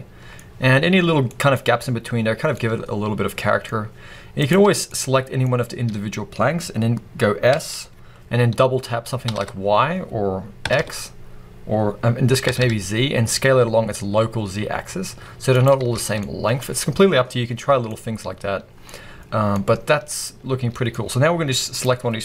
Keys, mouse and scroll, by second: 0.2-1.1 scroll up 1, 1.5 scroll up 1, 2.1 scroll up 1, 2.2-2.5 scroll down 2, 4.3 click, 4.7 scroll up 2, 4.8-15.5 middle drag, 5.4-7.3 scroll up 2, 7.3 scroll up 1, 7.4 s, 15.5 click, 15.7 scroll down 2, 15.9 alt+a, 16.1-21.6 middle drag, 17.5 scroll down 2, 18.7-19.4 scroll up 2, 21.6 click.